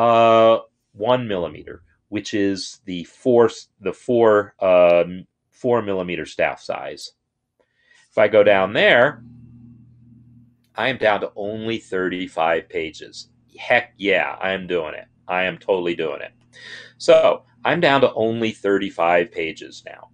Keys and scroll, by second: 6.8 BackSpace.